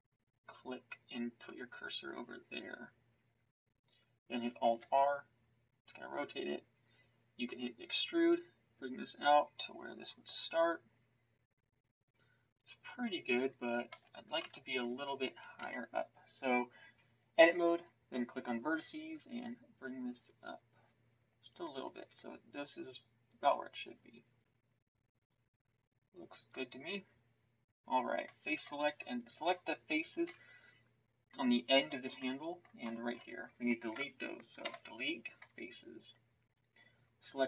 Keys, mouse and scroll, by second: 4.8 alt+r, 7.9 e, 13.9 z, 14.4 a, 15.5 b, 28.2-30.2 middle drag, 30.2 z, 34.6 Delete, 37.0 middle click.